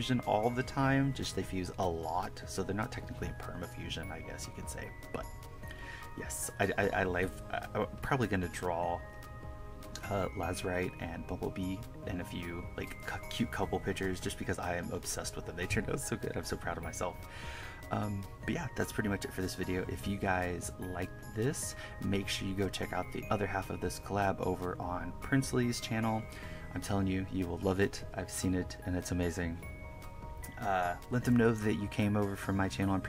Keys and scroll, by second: 0.0-2.2 typing, 0.7 KP_Add, 3.6 1, 4.2 1, 5.1 1, 5.4 1, 6.6 KP_Subtract, 7.4-9.7 typing, 8.0 KP_Subtract, 10.3 KP_Subtract, 11.2 KP_Add, 11.4-14.7 typing, 13.0 KP_Subtract, 13.7 KP_Subtract, 16.2-24.7 typing, 18.4 KP_Subtract, 18.8 KP_Add, 19.0 KP_Subtract, 19.2 KP_Add, 20.3 KP_Subtract, 20.5 KP_Add, 25.0 KP_Subtract, 25.8 KP_Add, 26.2 1, 27.6-31.4 typing, 29.5 KP_Subtract, 32.1 KP_Add.